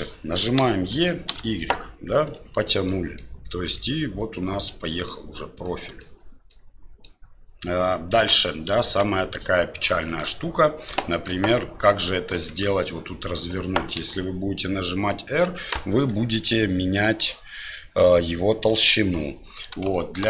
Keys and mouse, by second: 0.6 e, 2.9 middle click, 3.7-5.1 middle drag, 5.7 middle click, 6.5 middle click, 8.1 KP_1, 8.9 KP_3, 10.1 shift+middle click, 11.1 shift+middle click, 12.5 shift+middle click, 13.9 r, 20.0 shift+middle click.